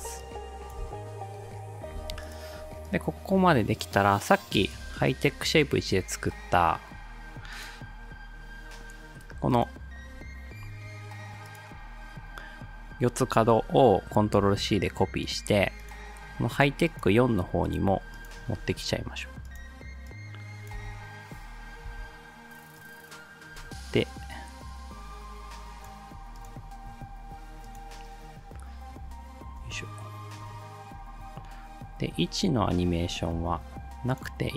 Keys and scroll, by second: 0.9 space, 14.5 ctrl+c, 18.6 ctrl+v, 20.8 space, 21.9 space, 29.6 r, 33.3 p.